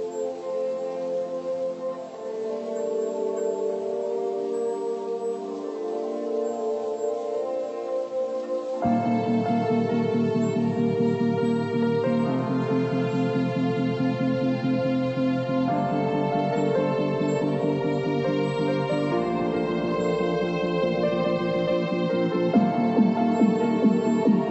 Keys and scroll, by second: 16.0 m, 16.9 a, 17.4 m, 18.9 t, 19.0 h.